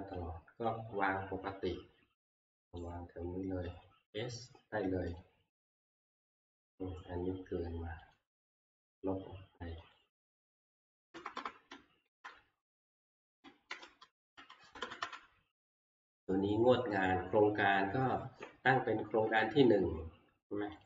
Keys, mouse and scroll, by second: 0.8 click, 2.8 right click, 2.8-3.2 scroll, 5.2 click, 8.1 click, 9.2 click, 10.0 shift+click, 11.1 Left, 11.4 Left, 12.1 Left, 13.7 Delete, 15.0 Up, 20.8 click.